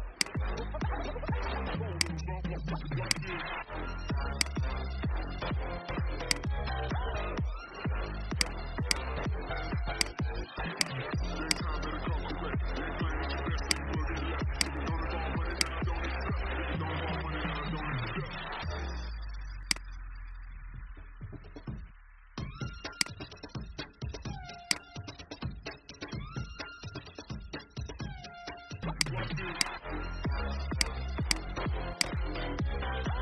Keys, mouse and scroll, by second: 0.0-1.1 right drag, 1.9 click, 7.7 ctrl+z, 8.3 click, 12.8 ctrl+g, 13.5 click, 16.2-17.4 drag, 18.5 ctrl+x, 19.5 click, 20.5 ctrl+f, 28.8-33.2 drag.